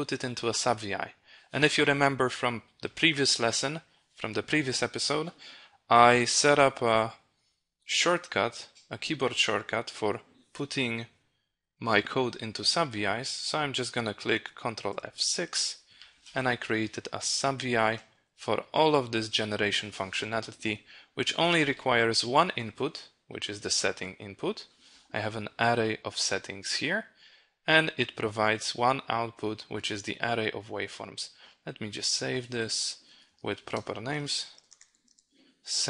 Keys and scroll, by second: 14.4 ctrl+F6.